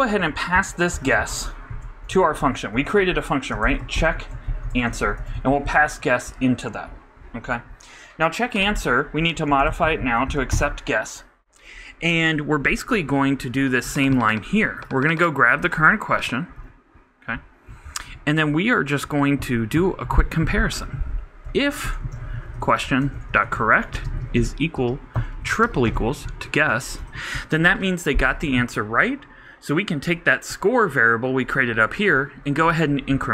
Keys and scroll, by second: 0.8 super+Down, 0.9 super+Right, 1.7 shift+super+BackSpace, 3.8-6.2 typing, 10.2 super+s, 10.3 super+Right, 10.5 super+Return, 15.6 super+c, 16.6 super+v, 21.7 shift+f, 22.0 shift+q, 26.4 shift+s, 26.8 shift+[, 27.0 shift+Return.